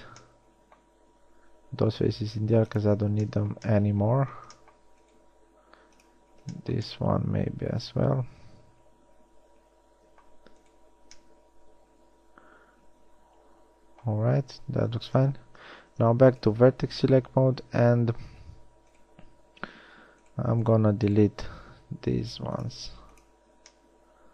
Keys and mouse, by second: 0.2 z, 1.7 x, 5.6 x, 10.0 middle click, 15.8 ctrl+Tab, 17.2 z, 17.6 z, 18.2 a, 21.8 x.